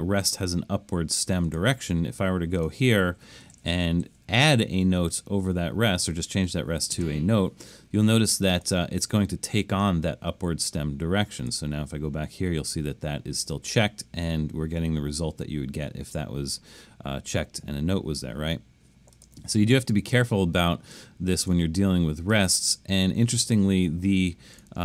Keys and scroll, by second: 3.3 Left, 3.5 Left, 3.7 Left, 4.0 Up, 4.5 Up, 20.4 super+z, 20.9 super+z, 21.5 super+z, 22.3 super+z, 23.8 Escape.